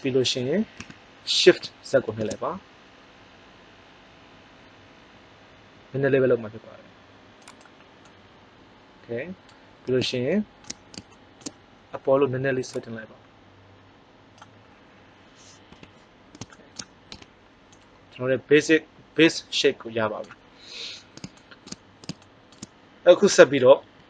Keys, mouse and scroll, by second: 0.7 s, 7.6 click, 12.6-13.9 drag, 15.7 KP_1, 17.0 Tab.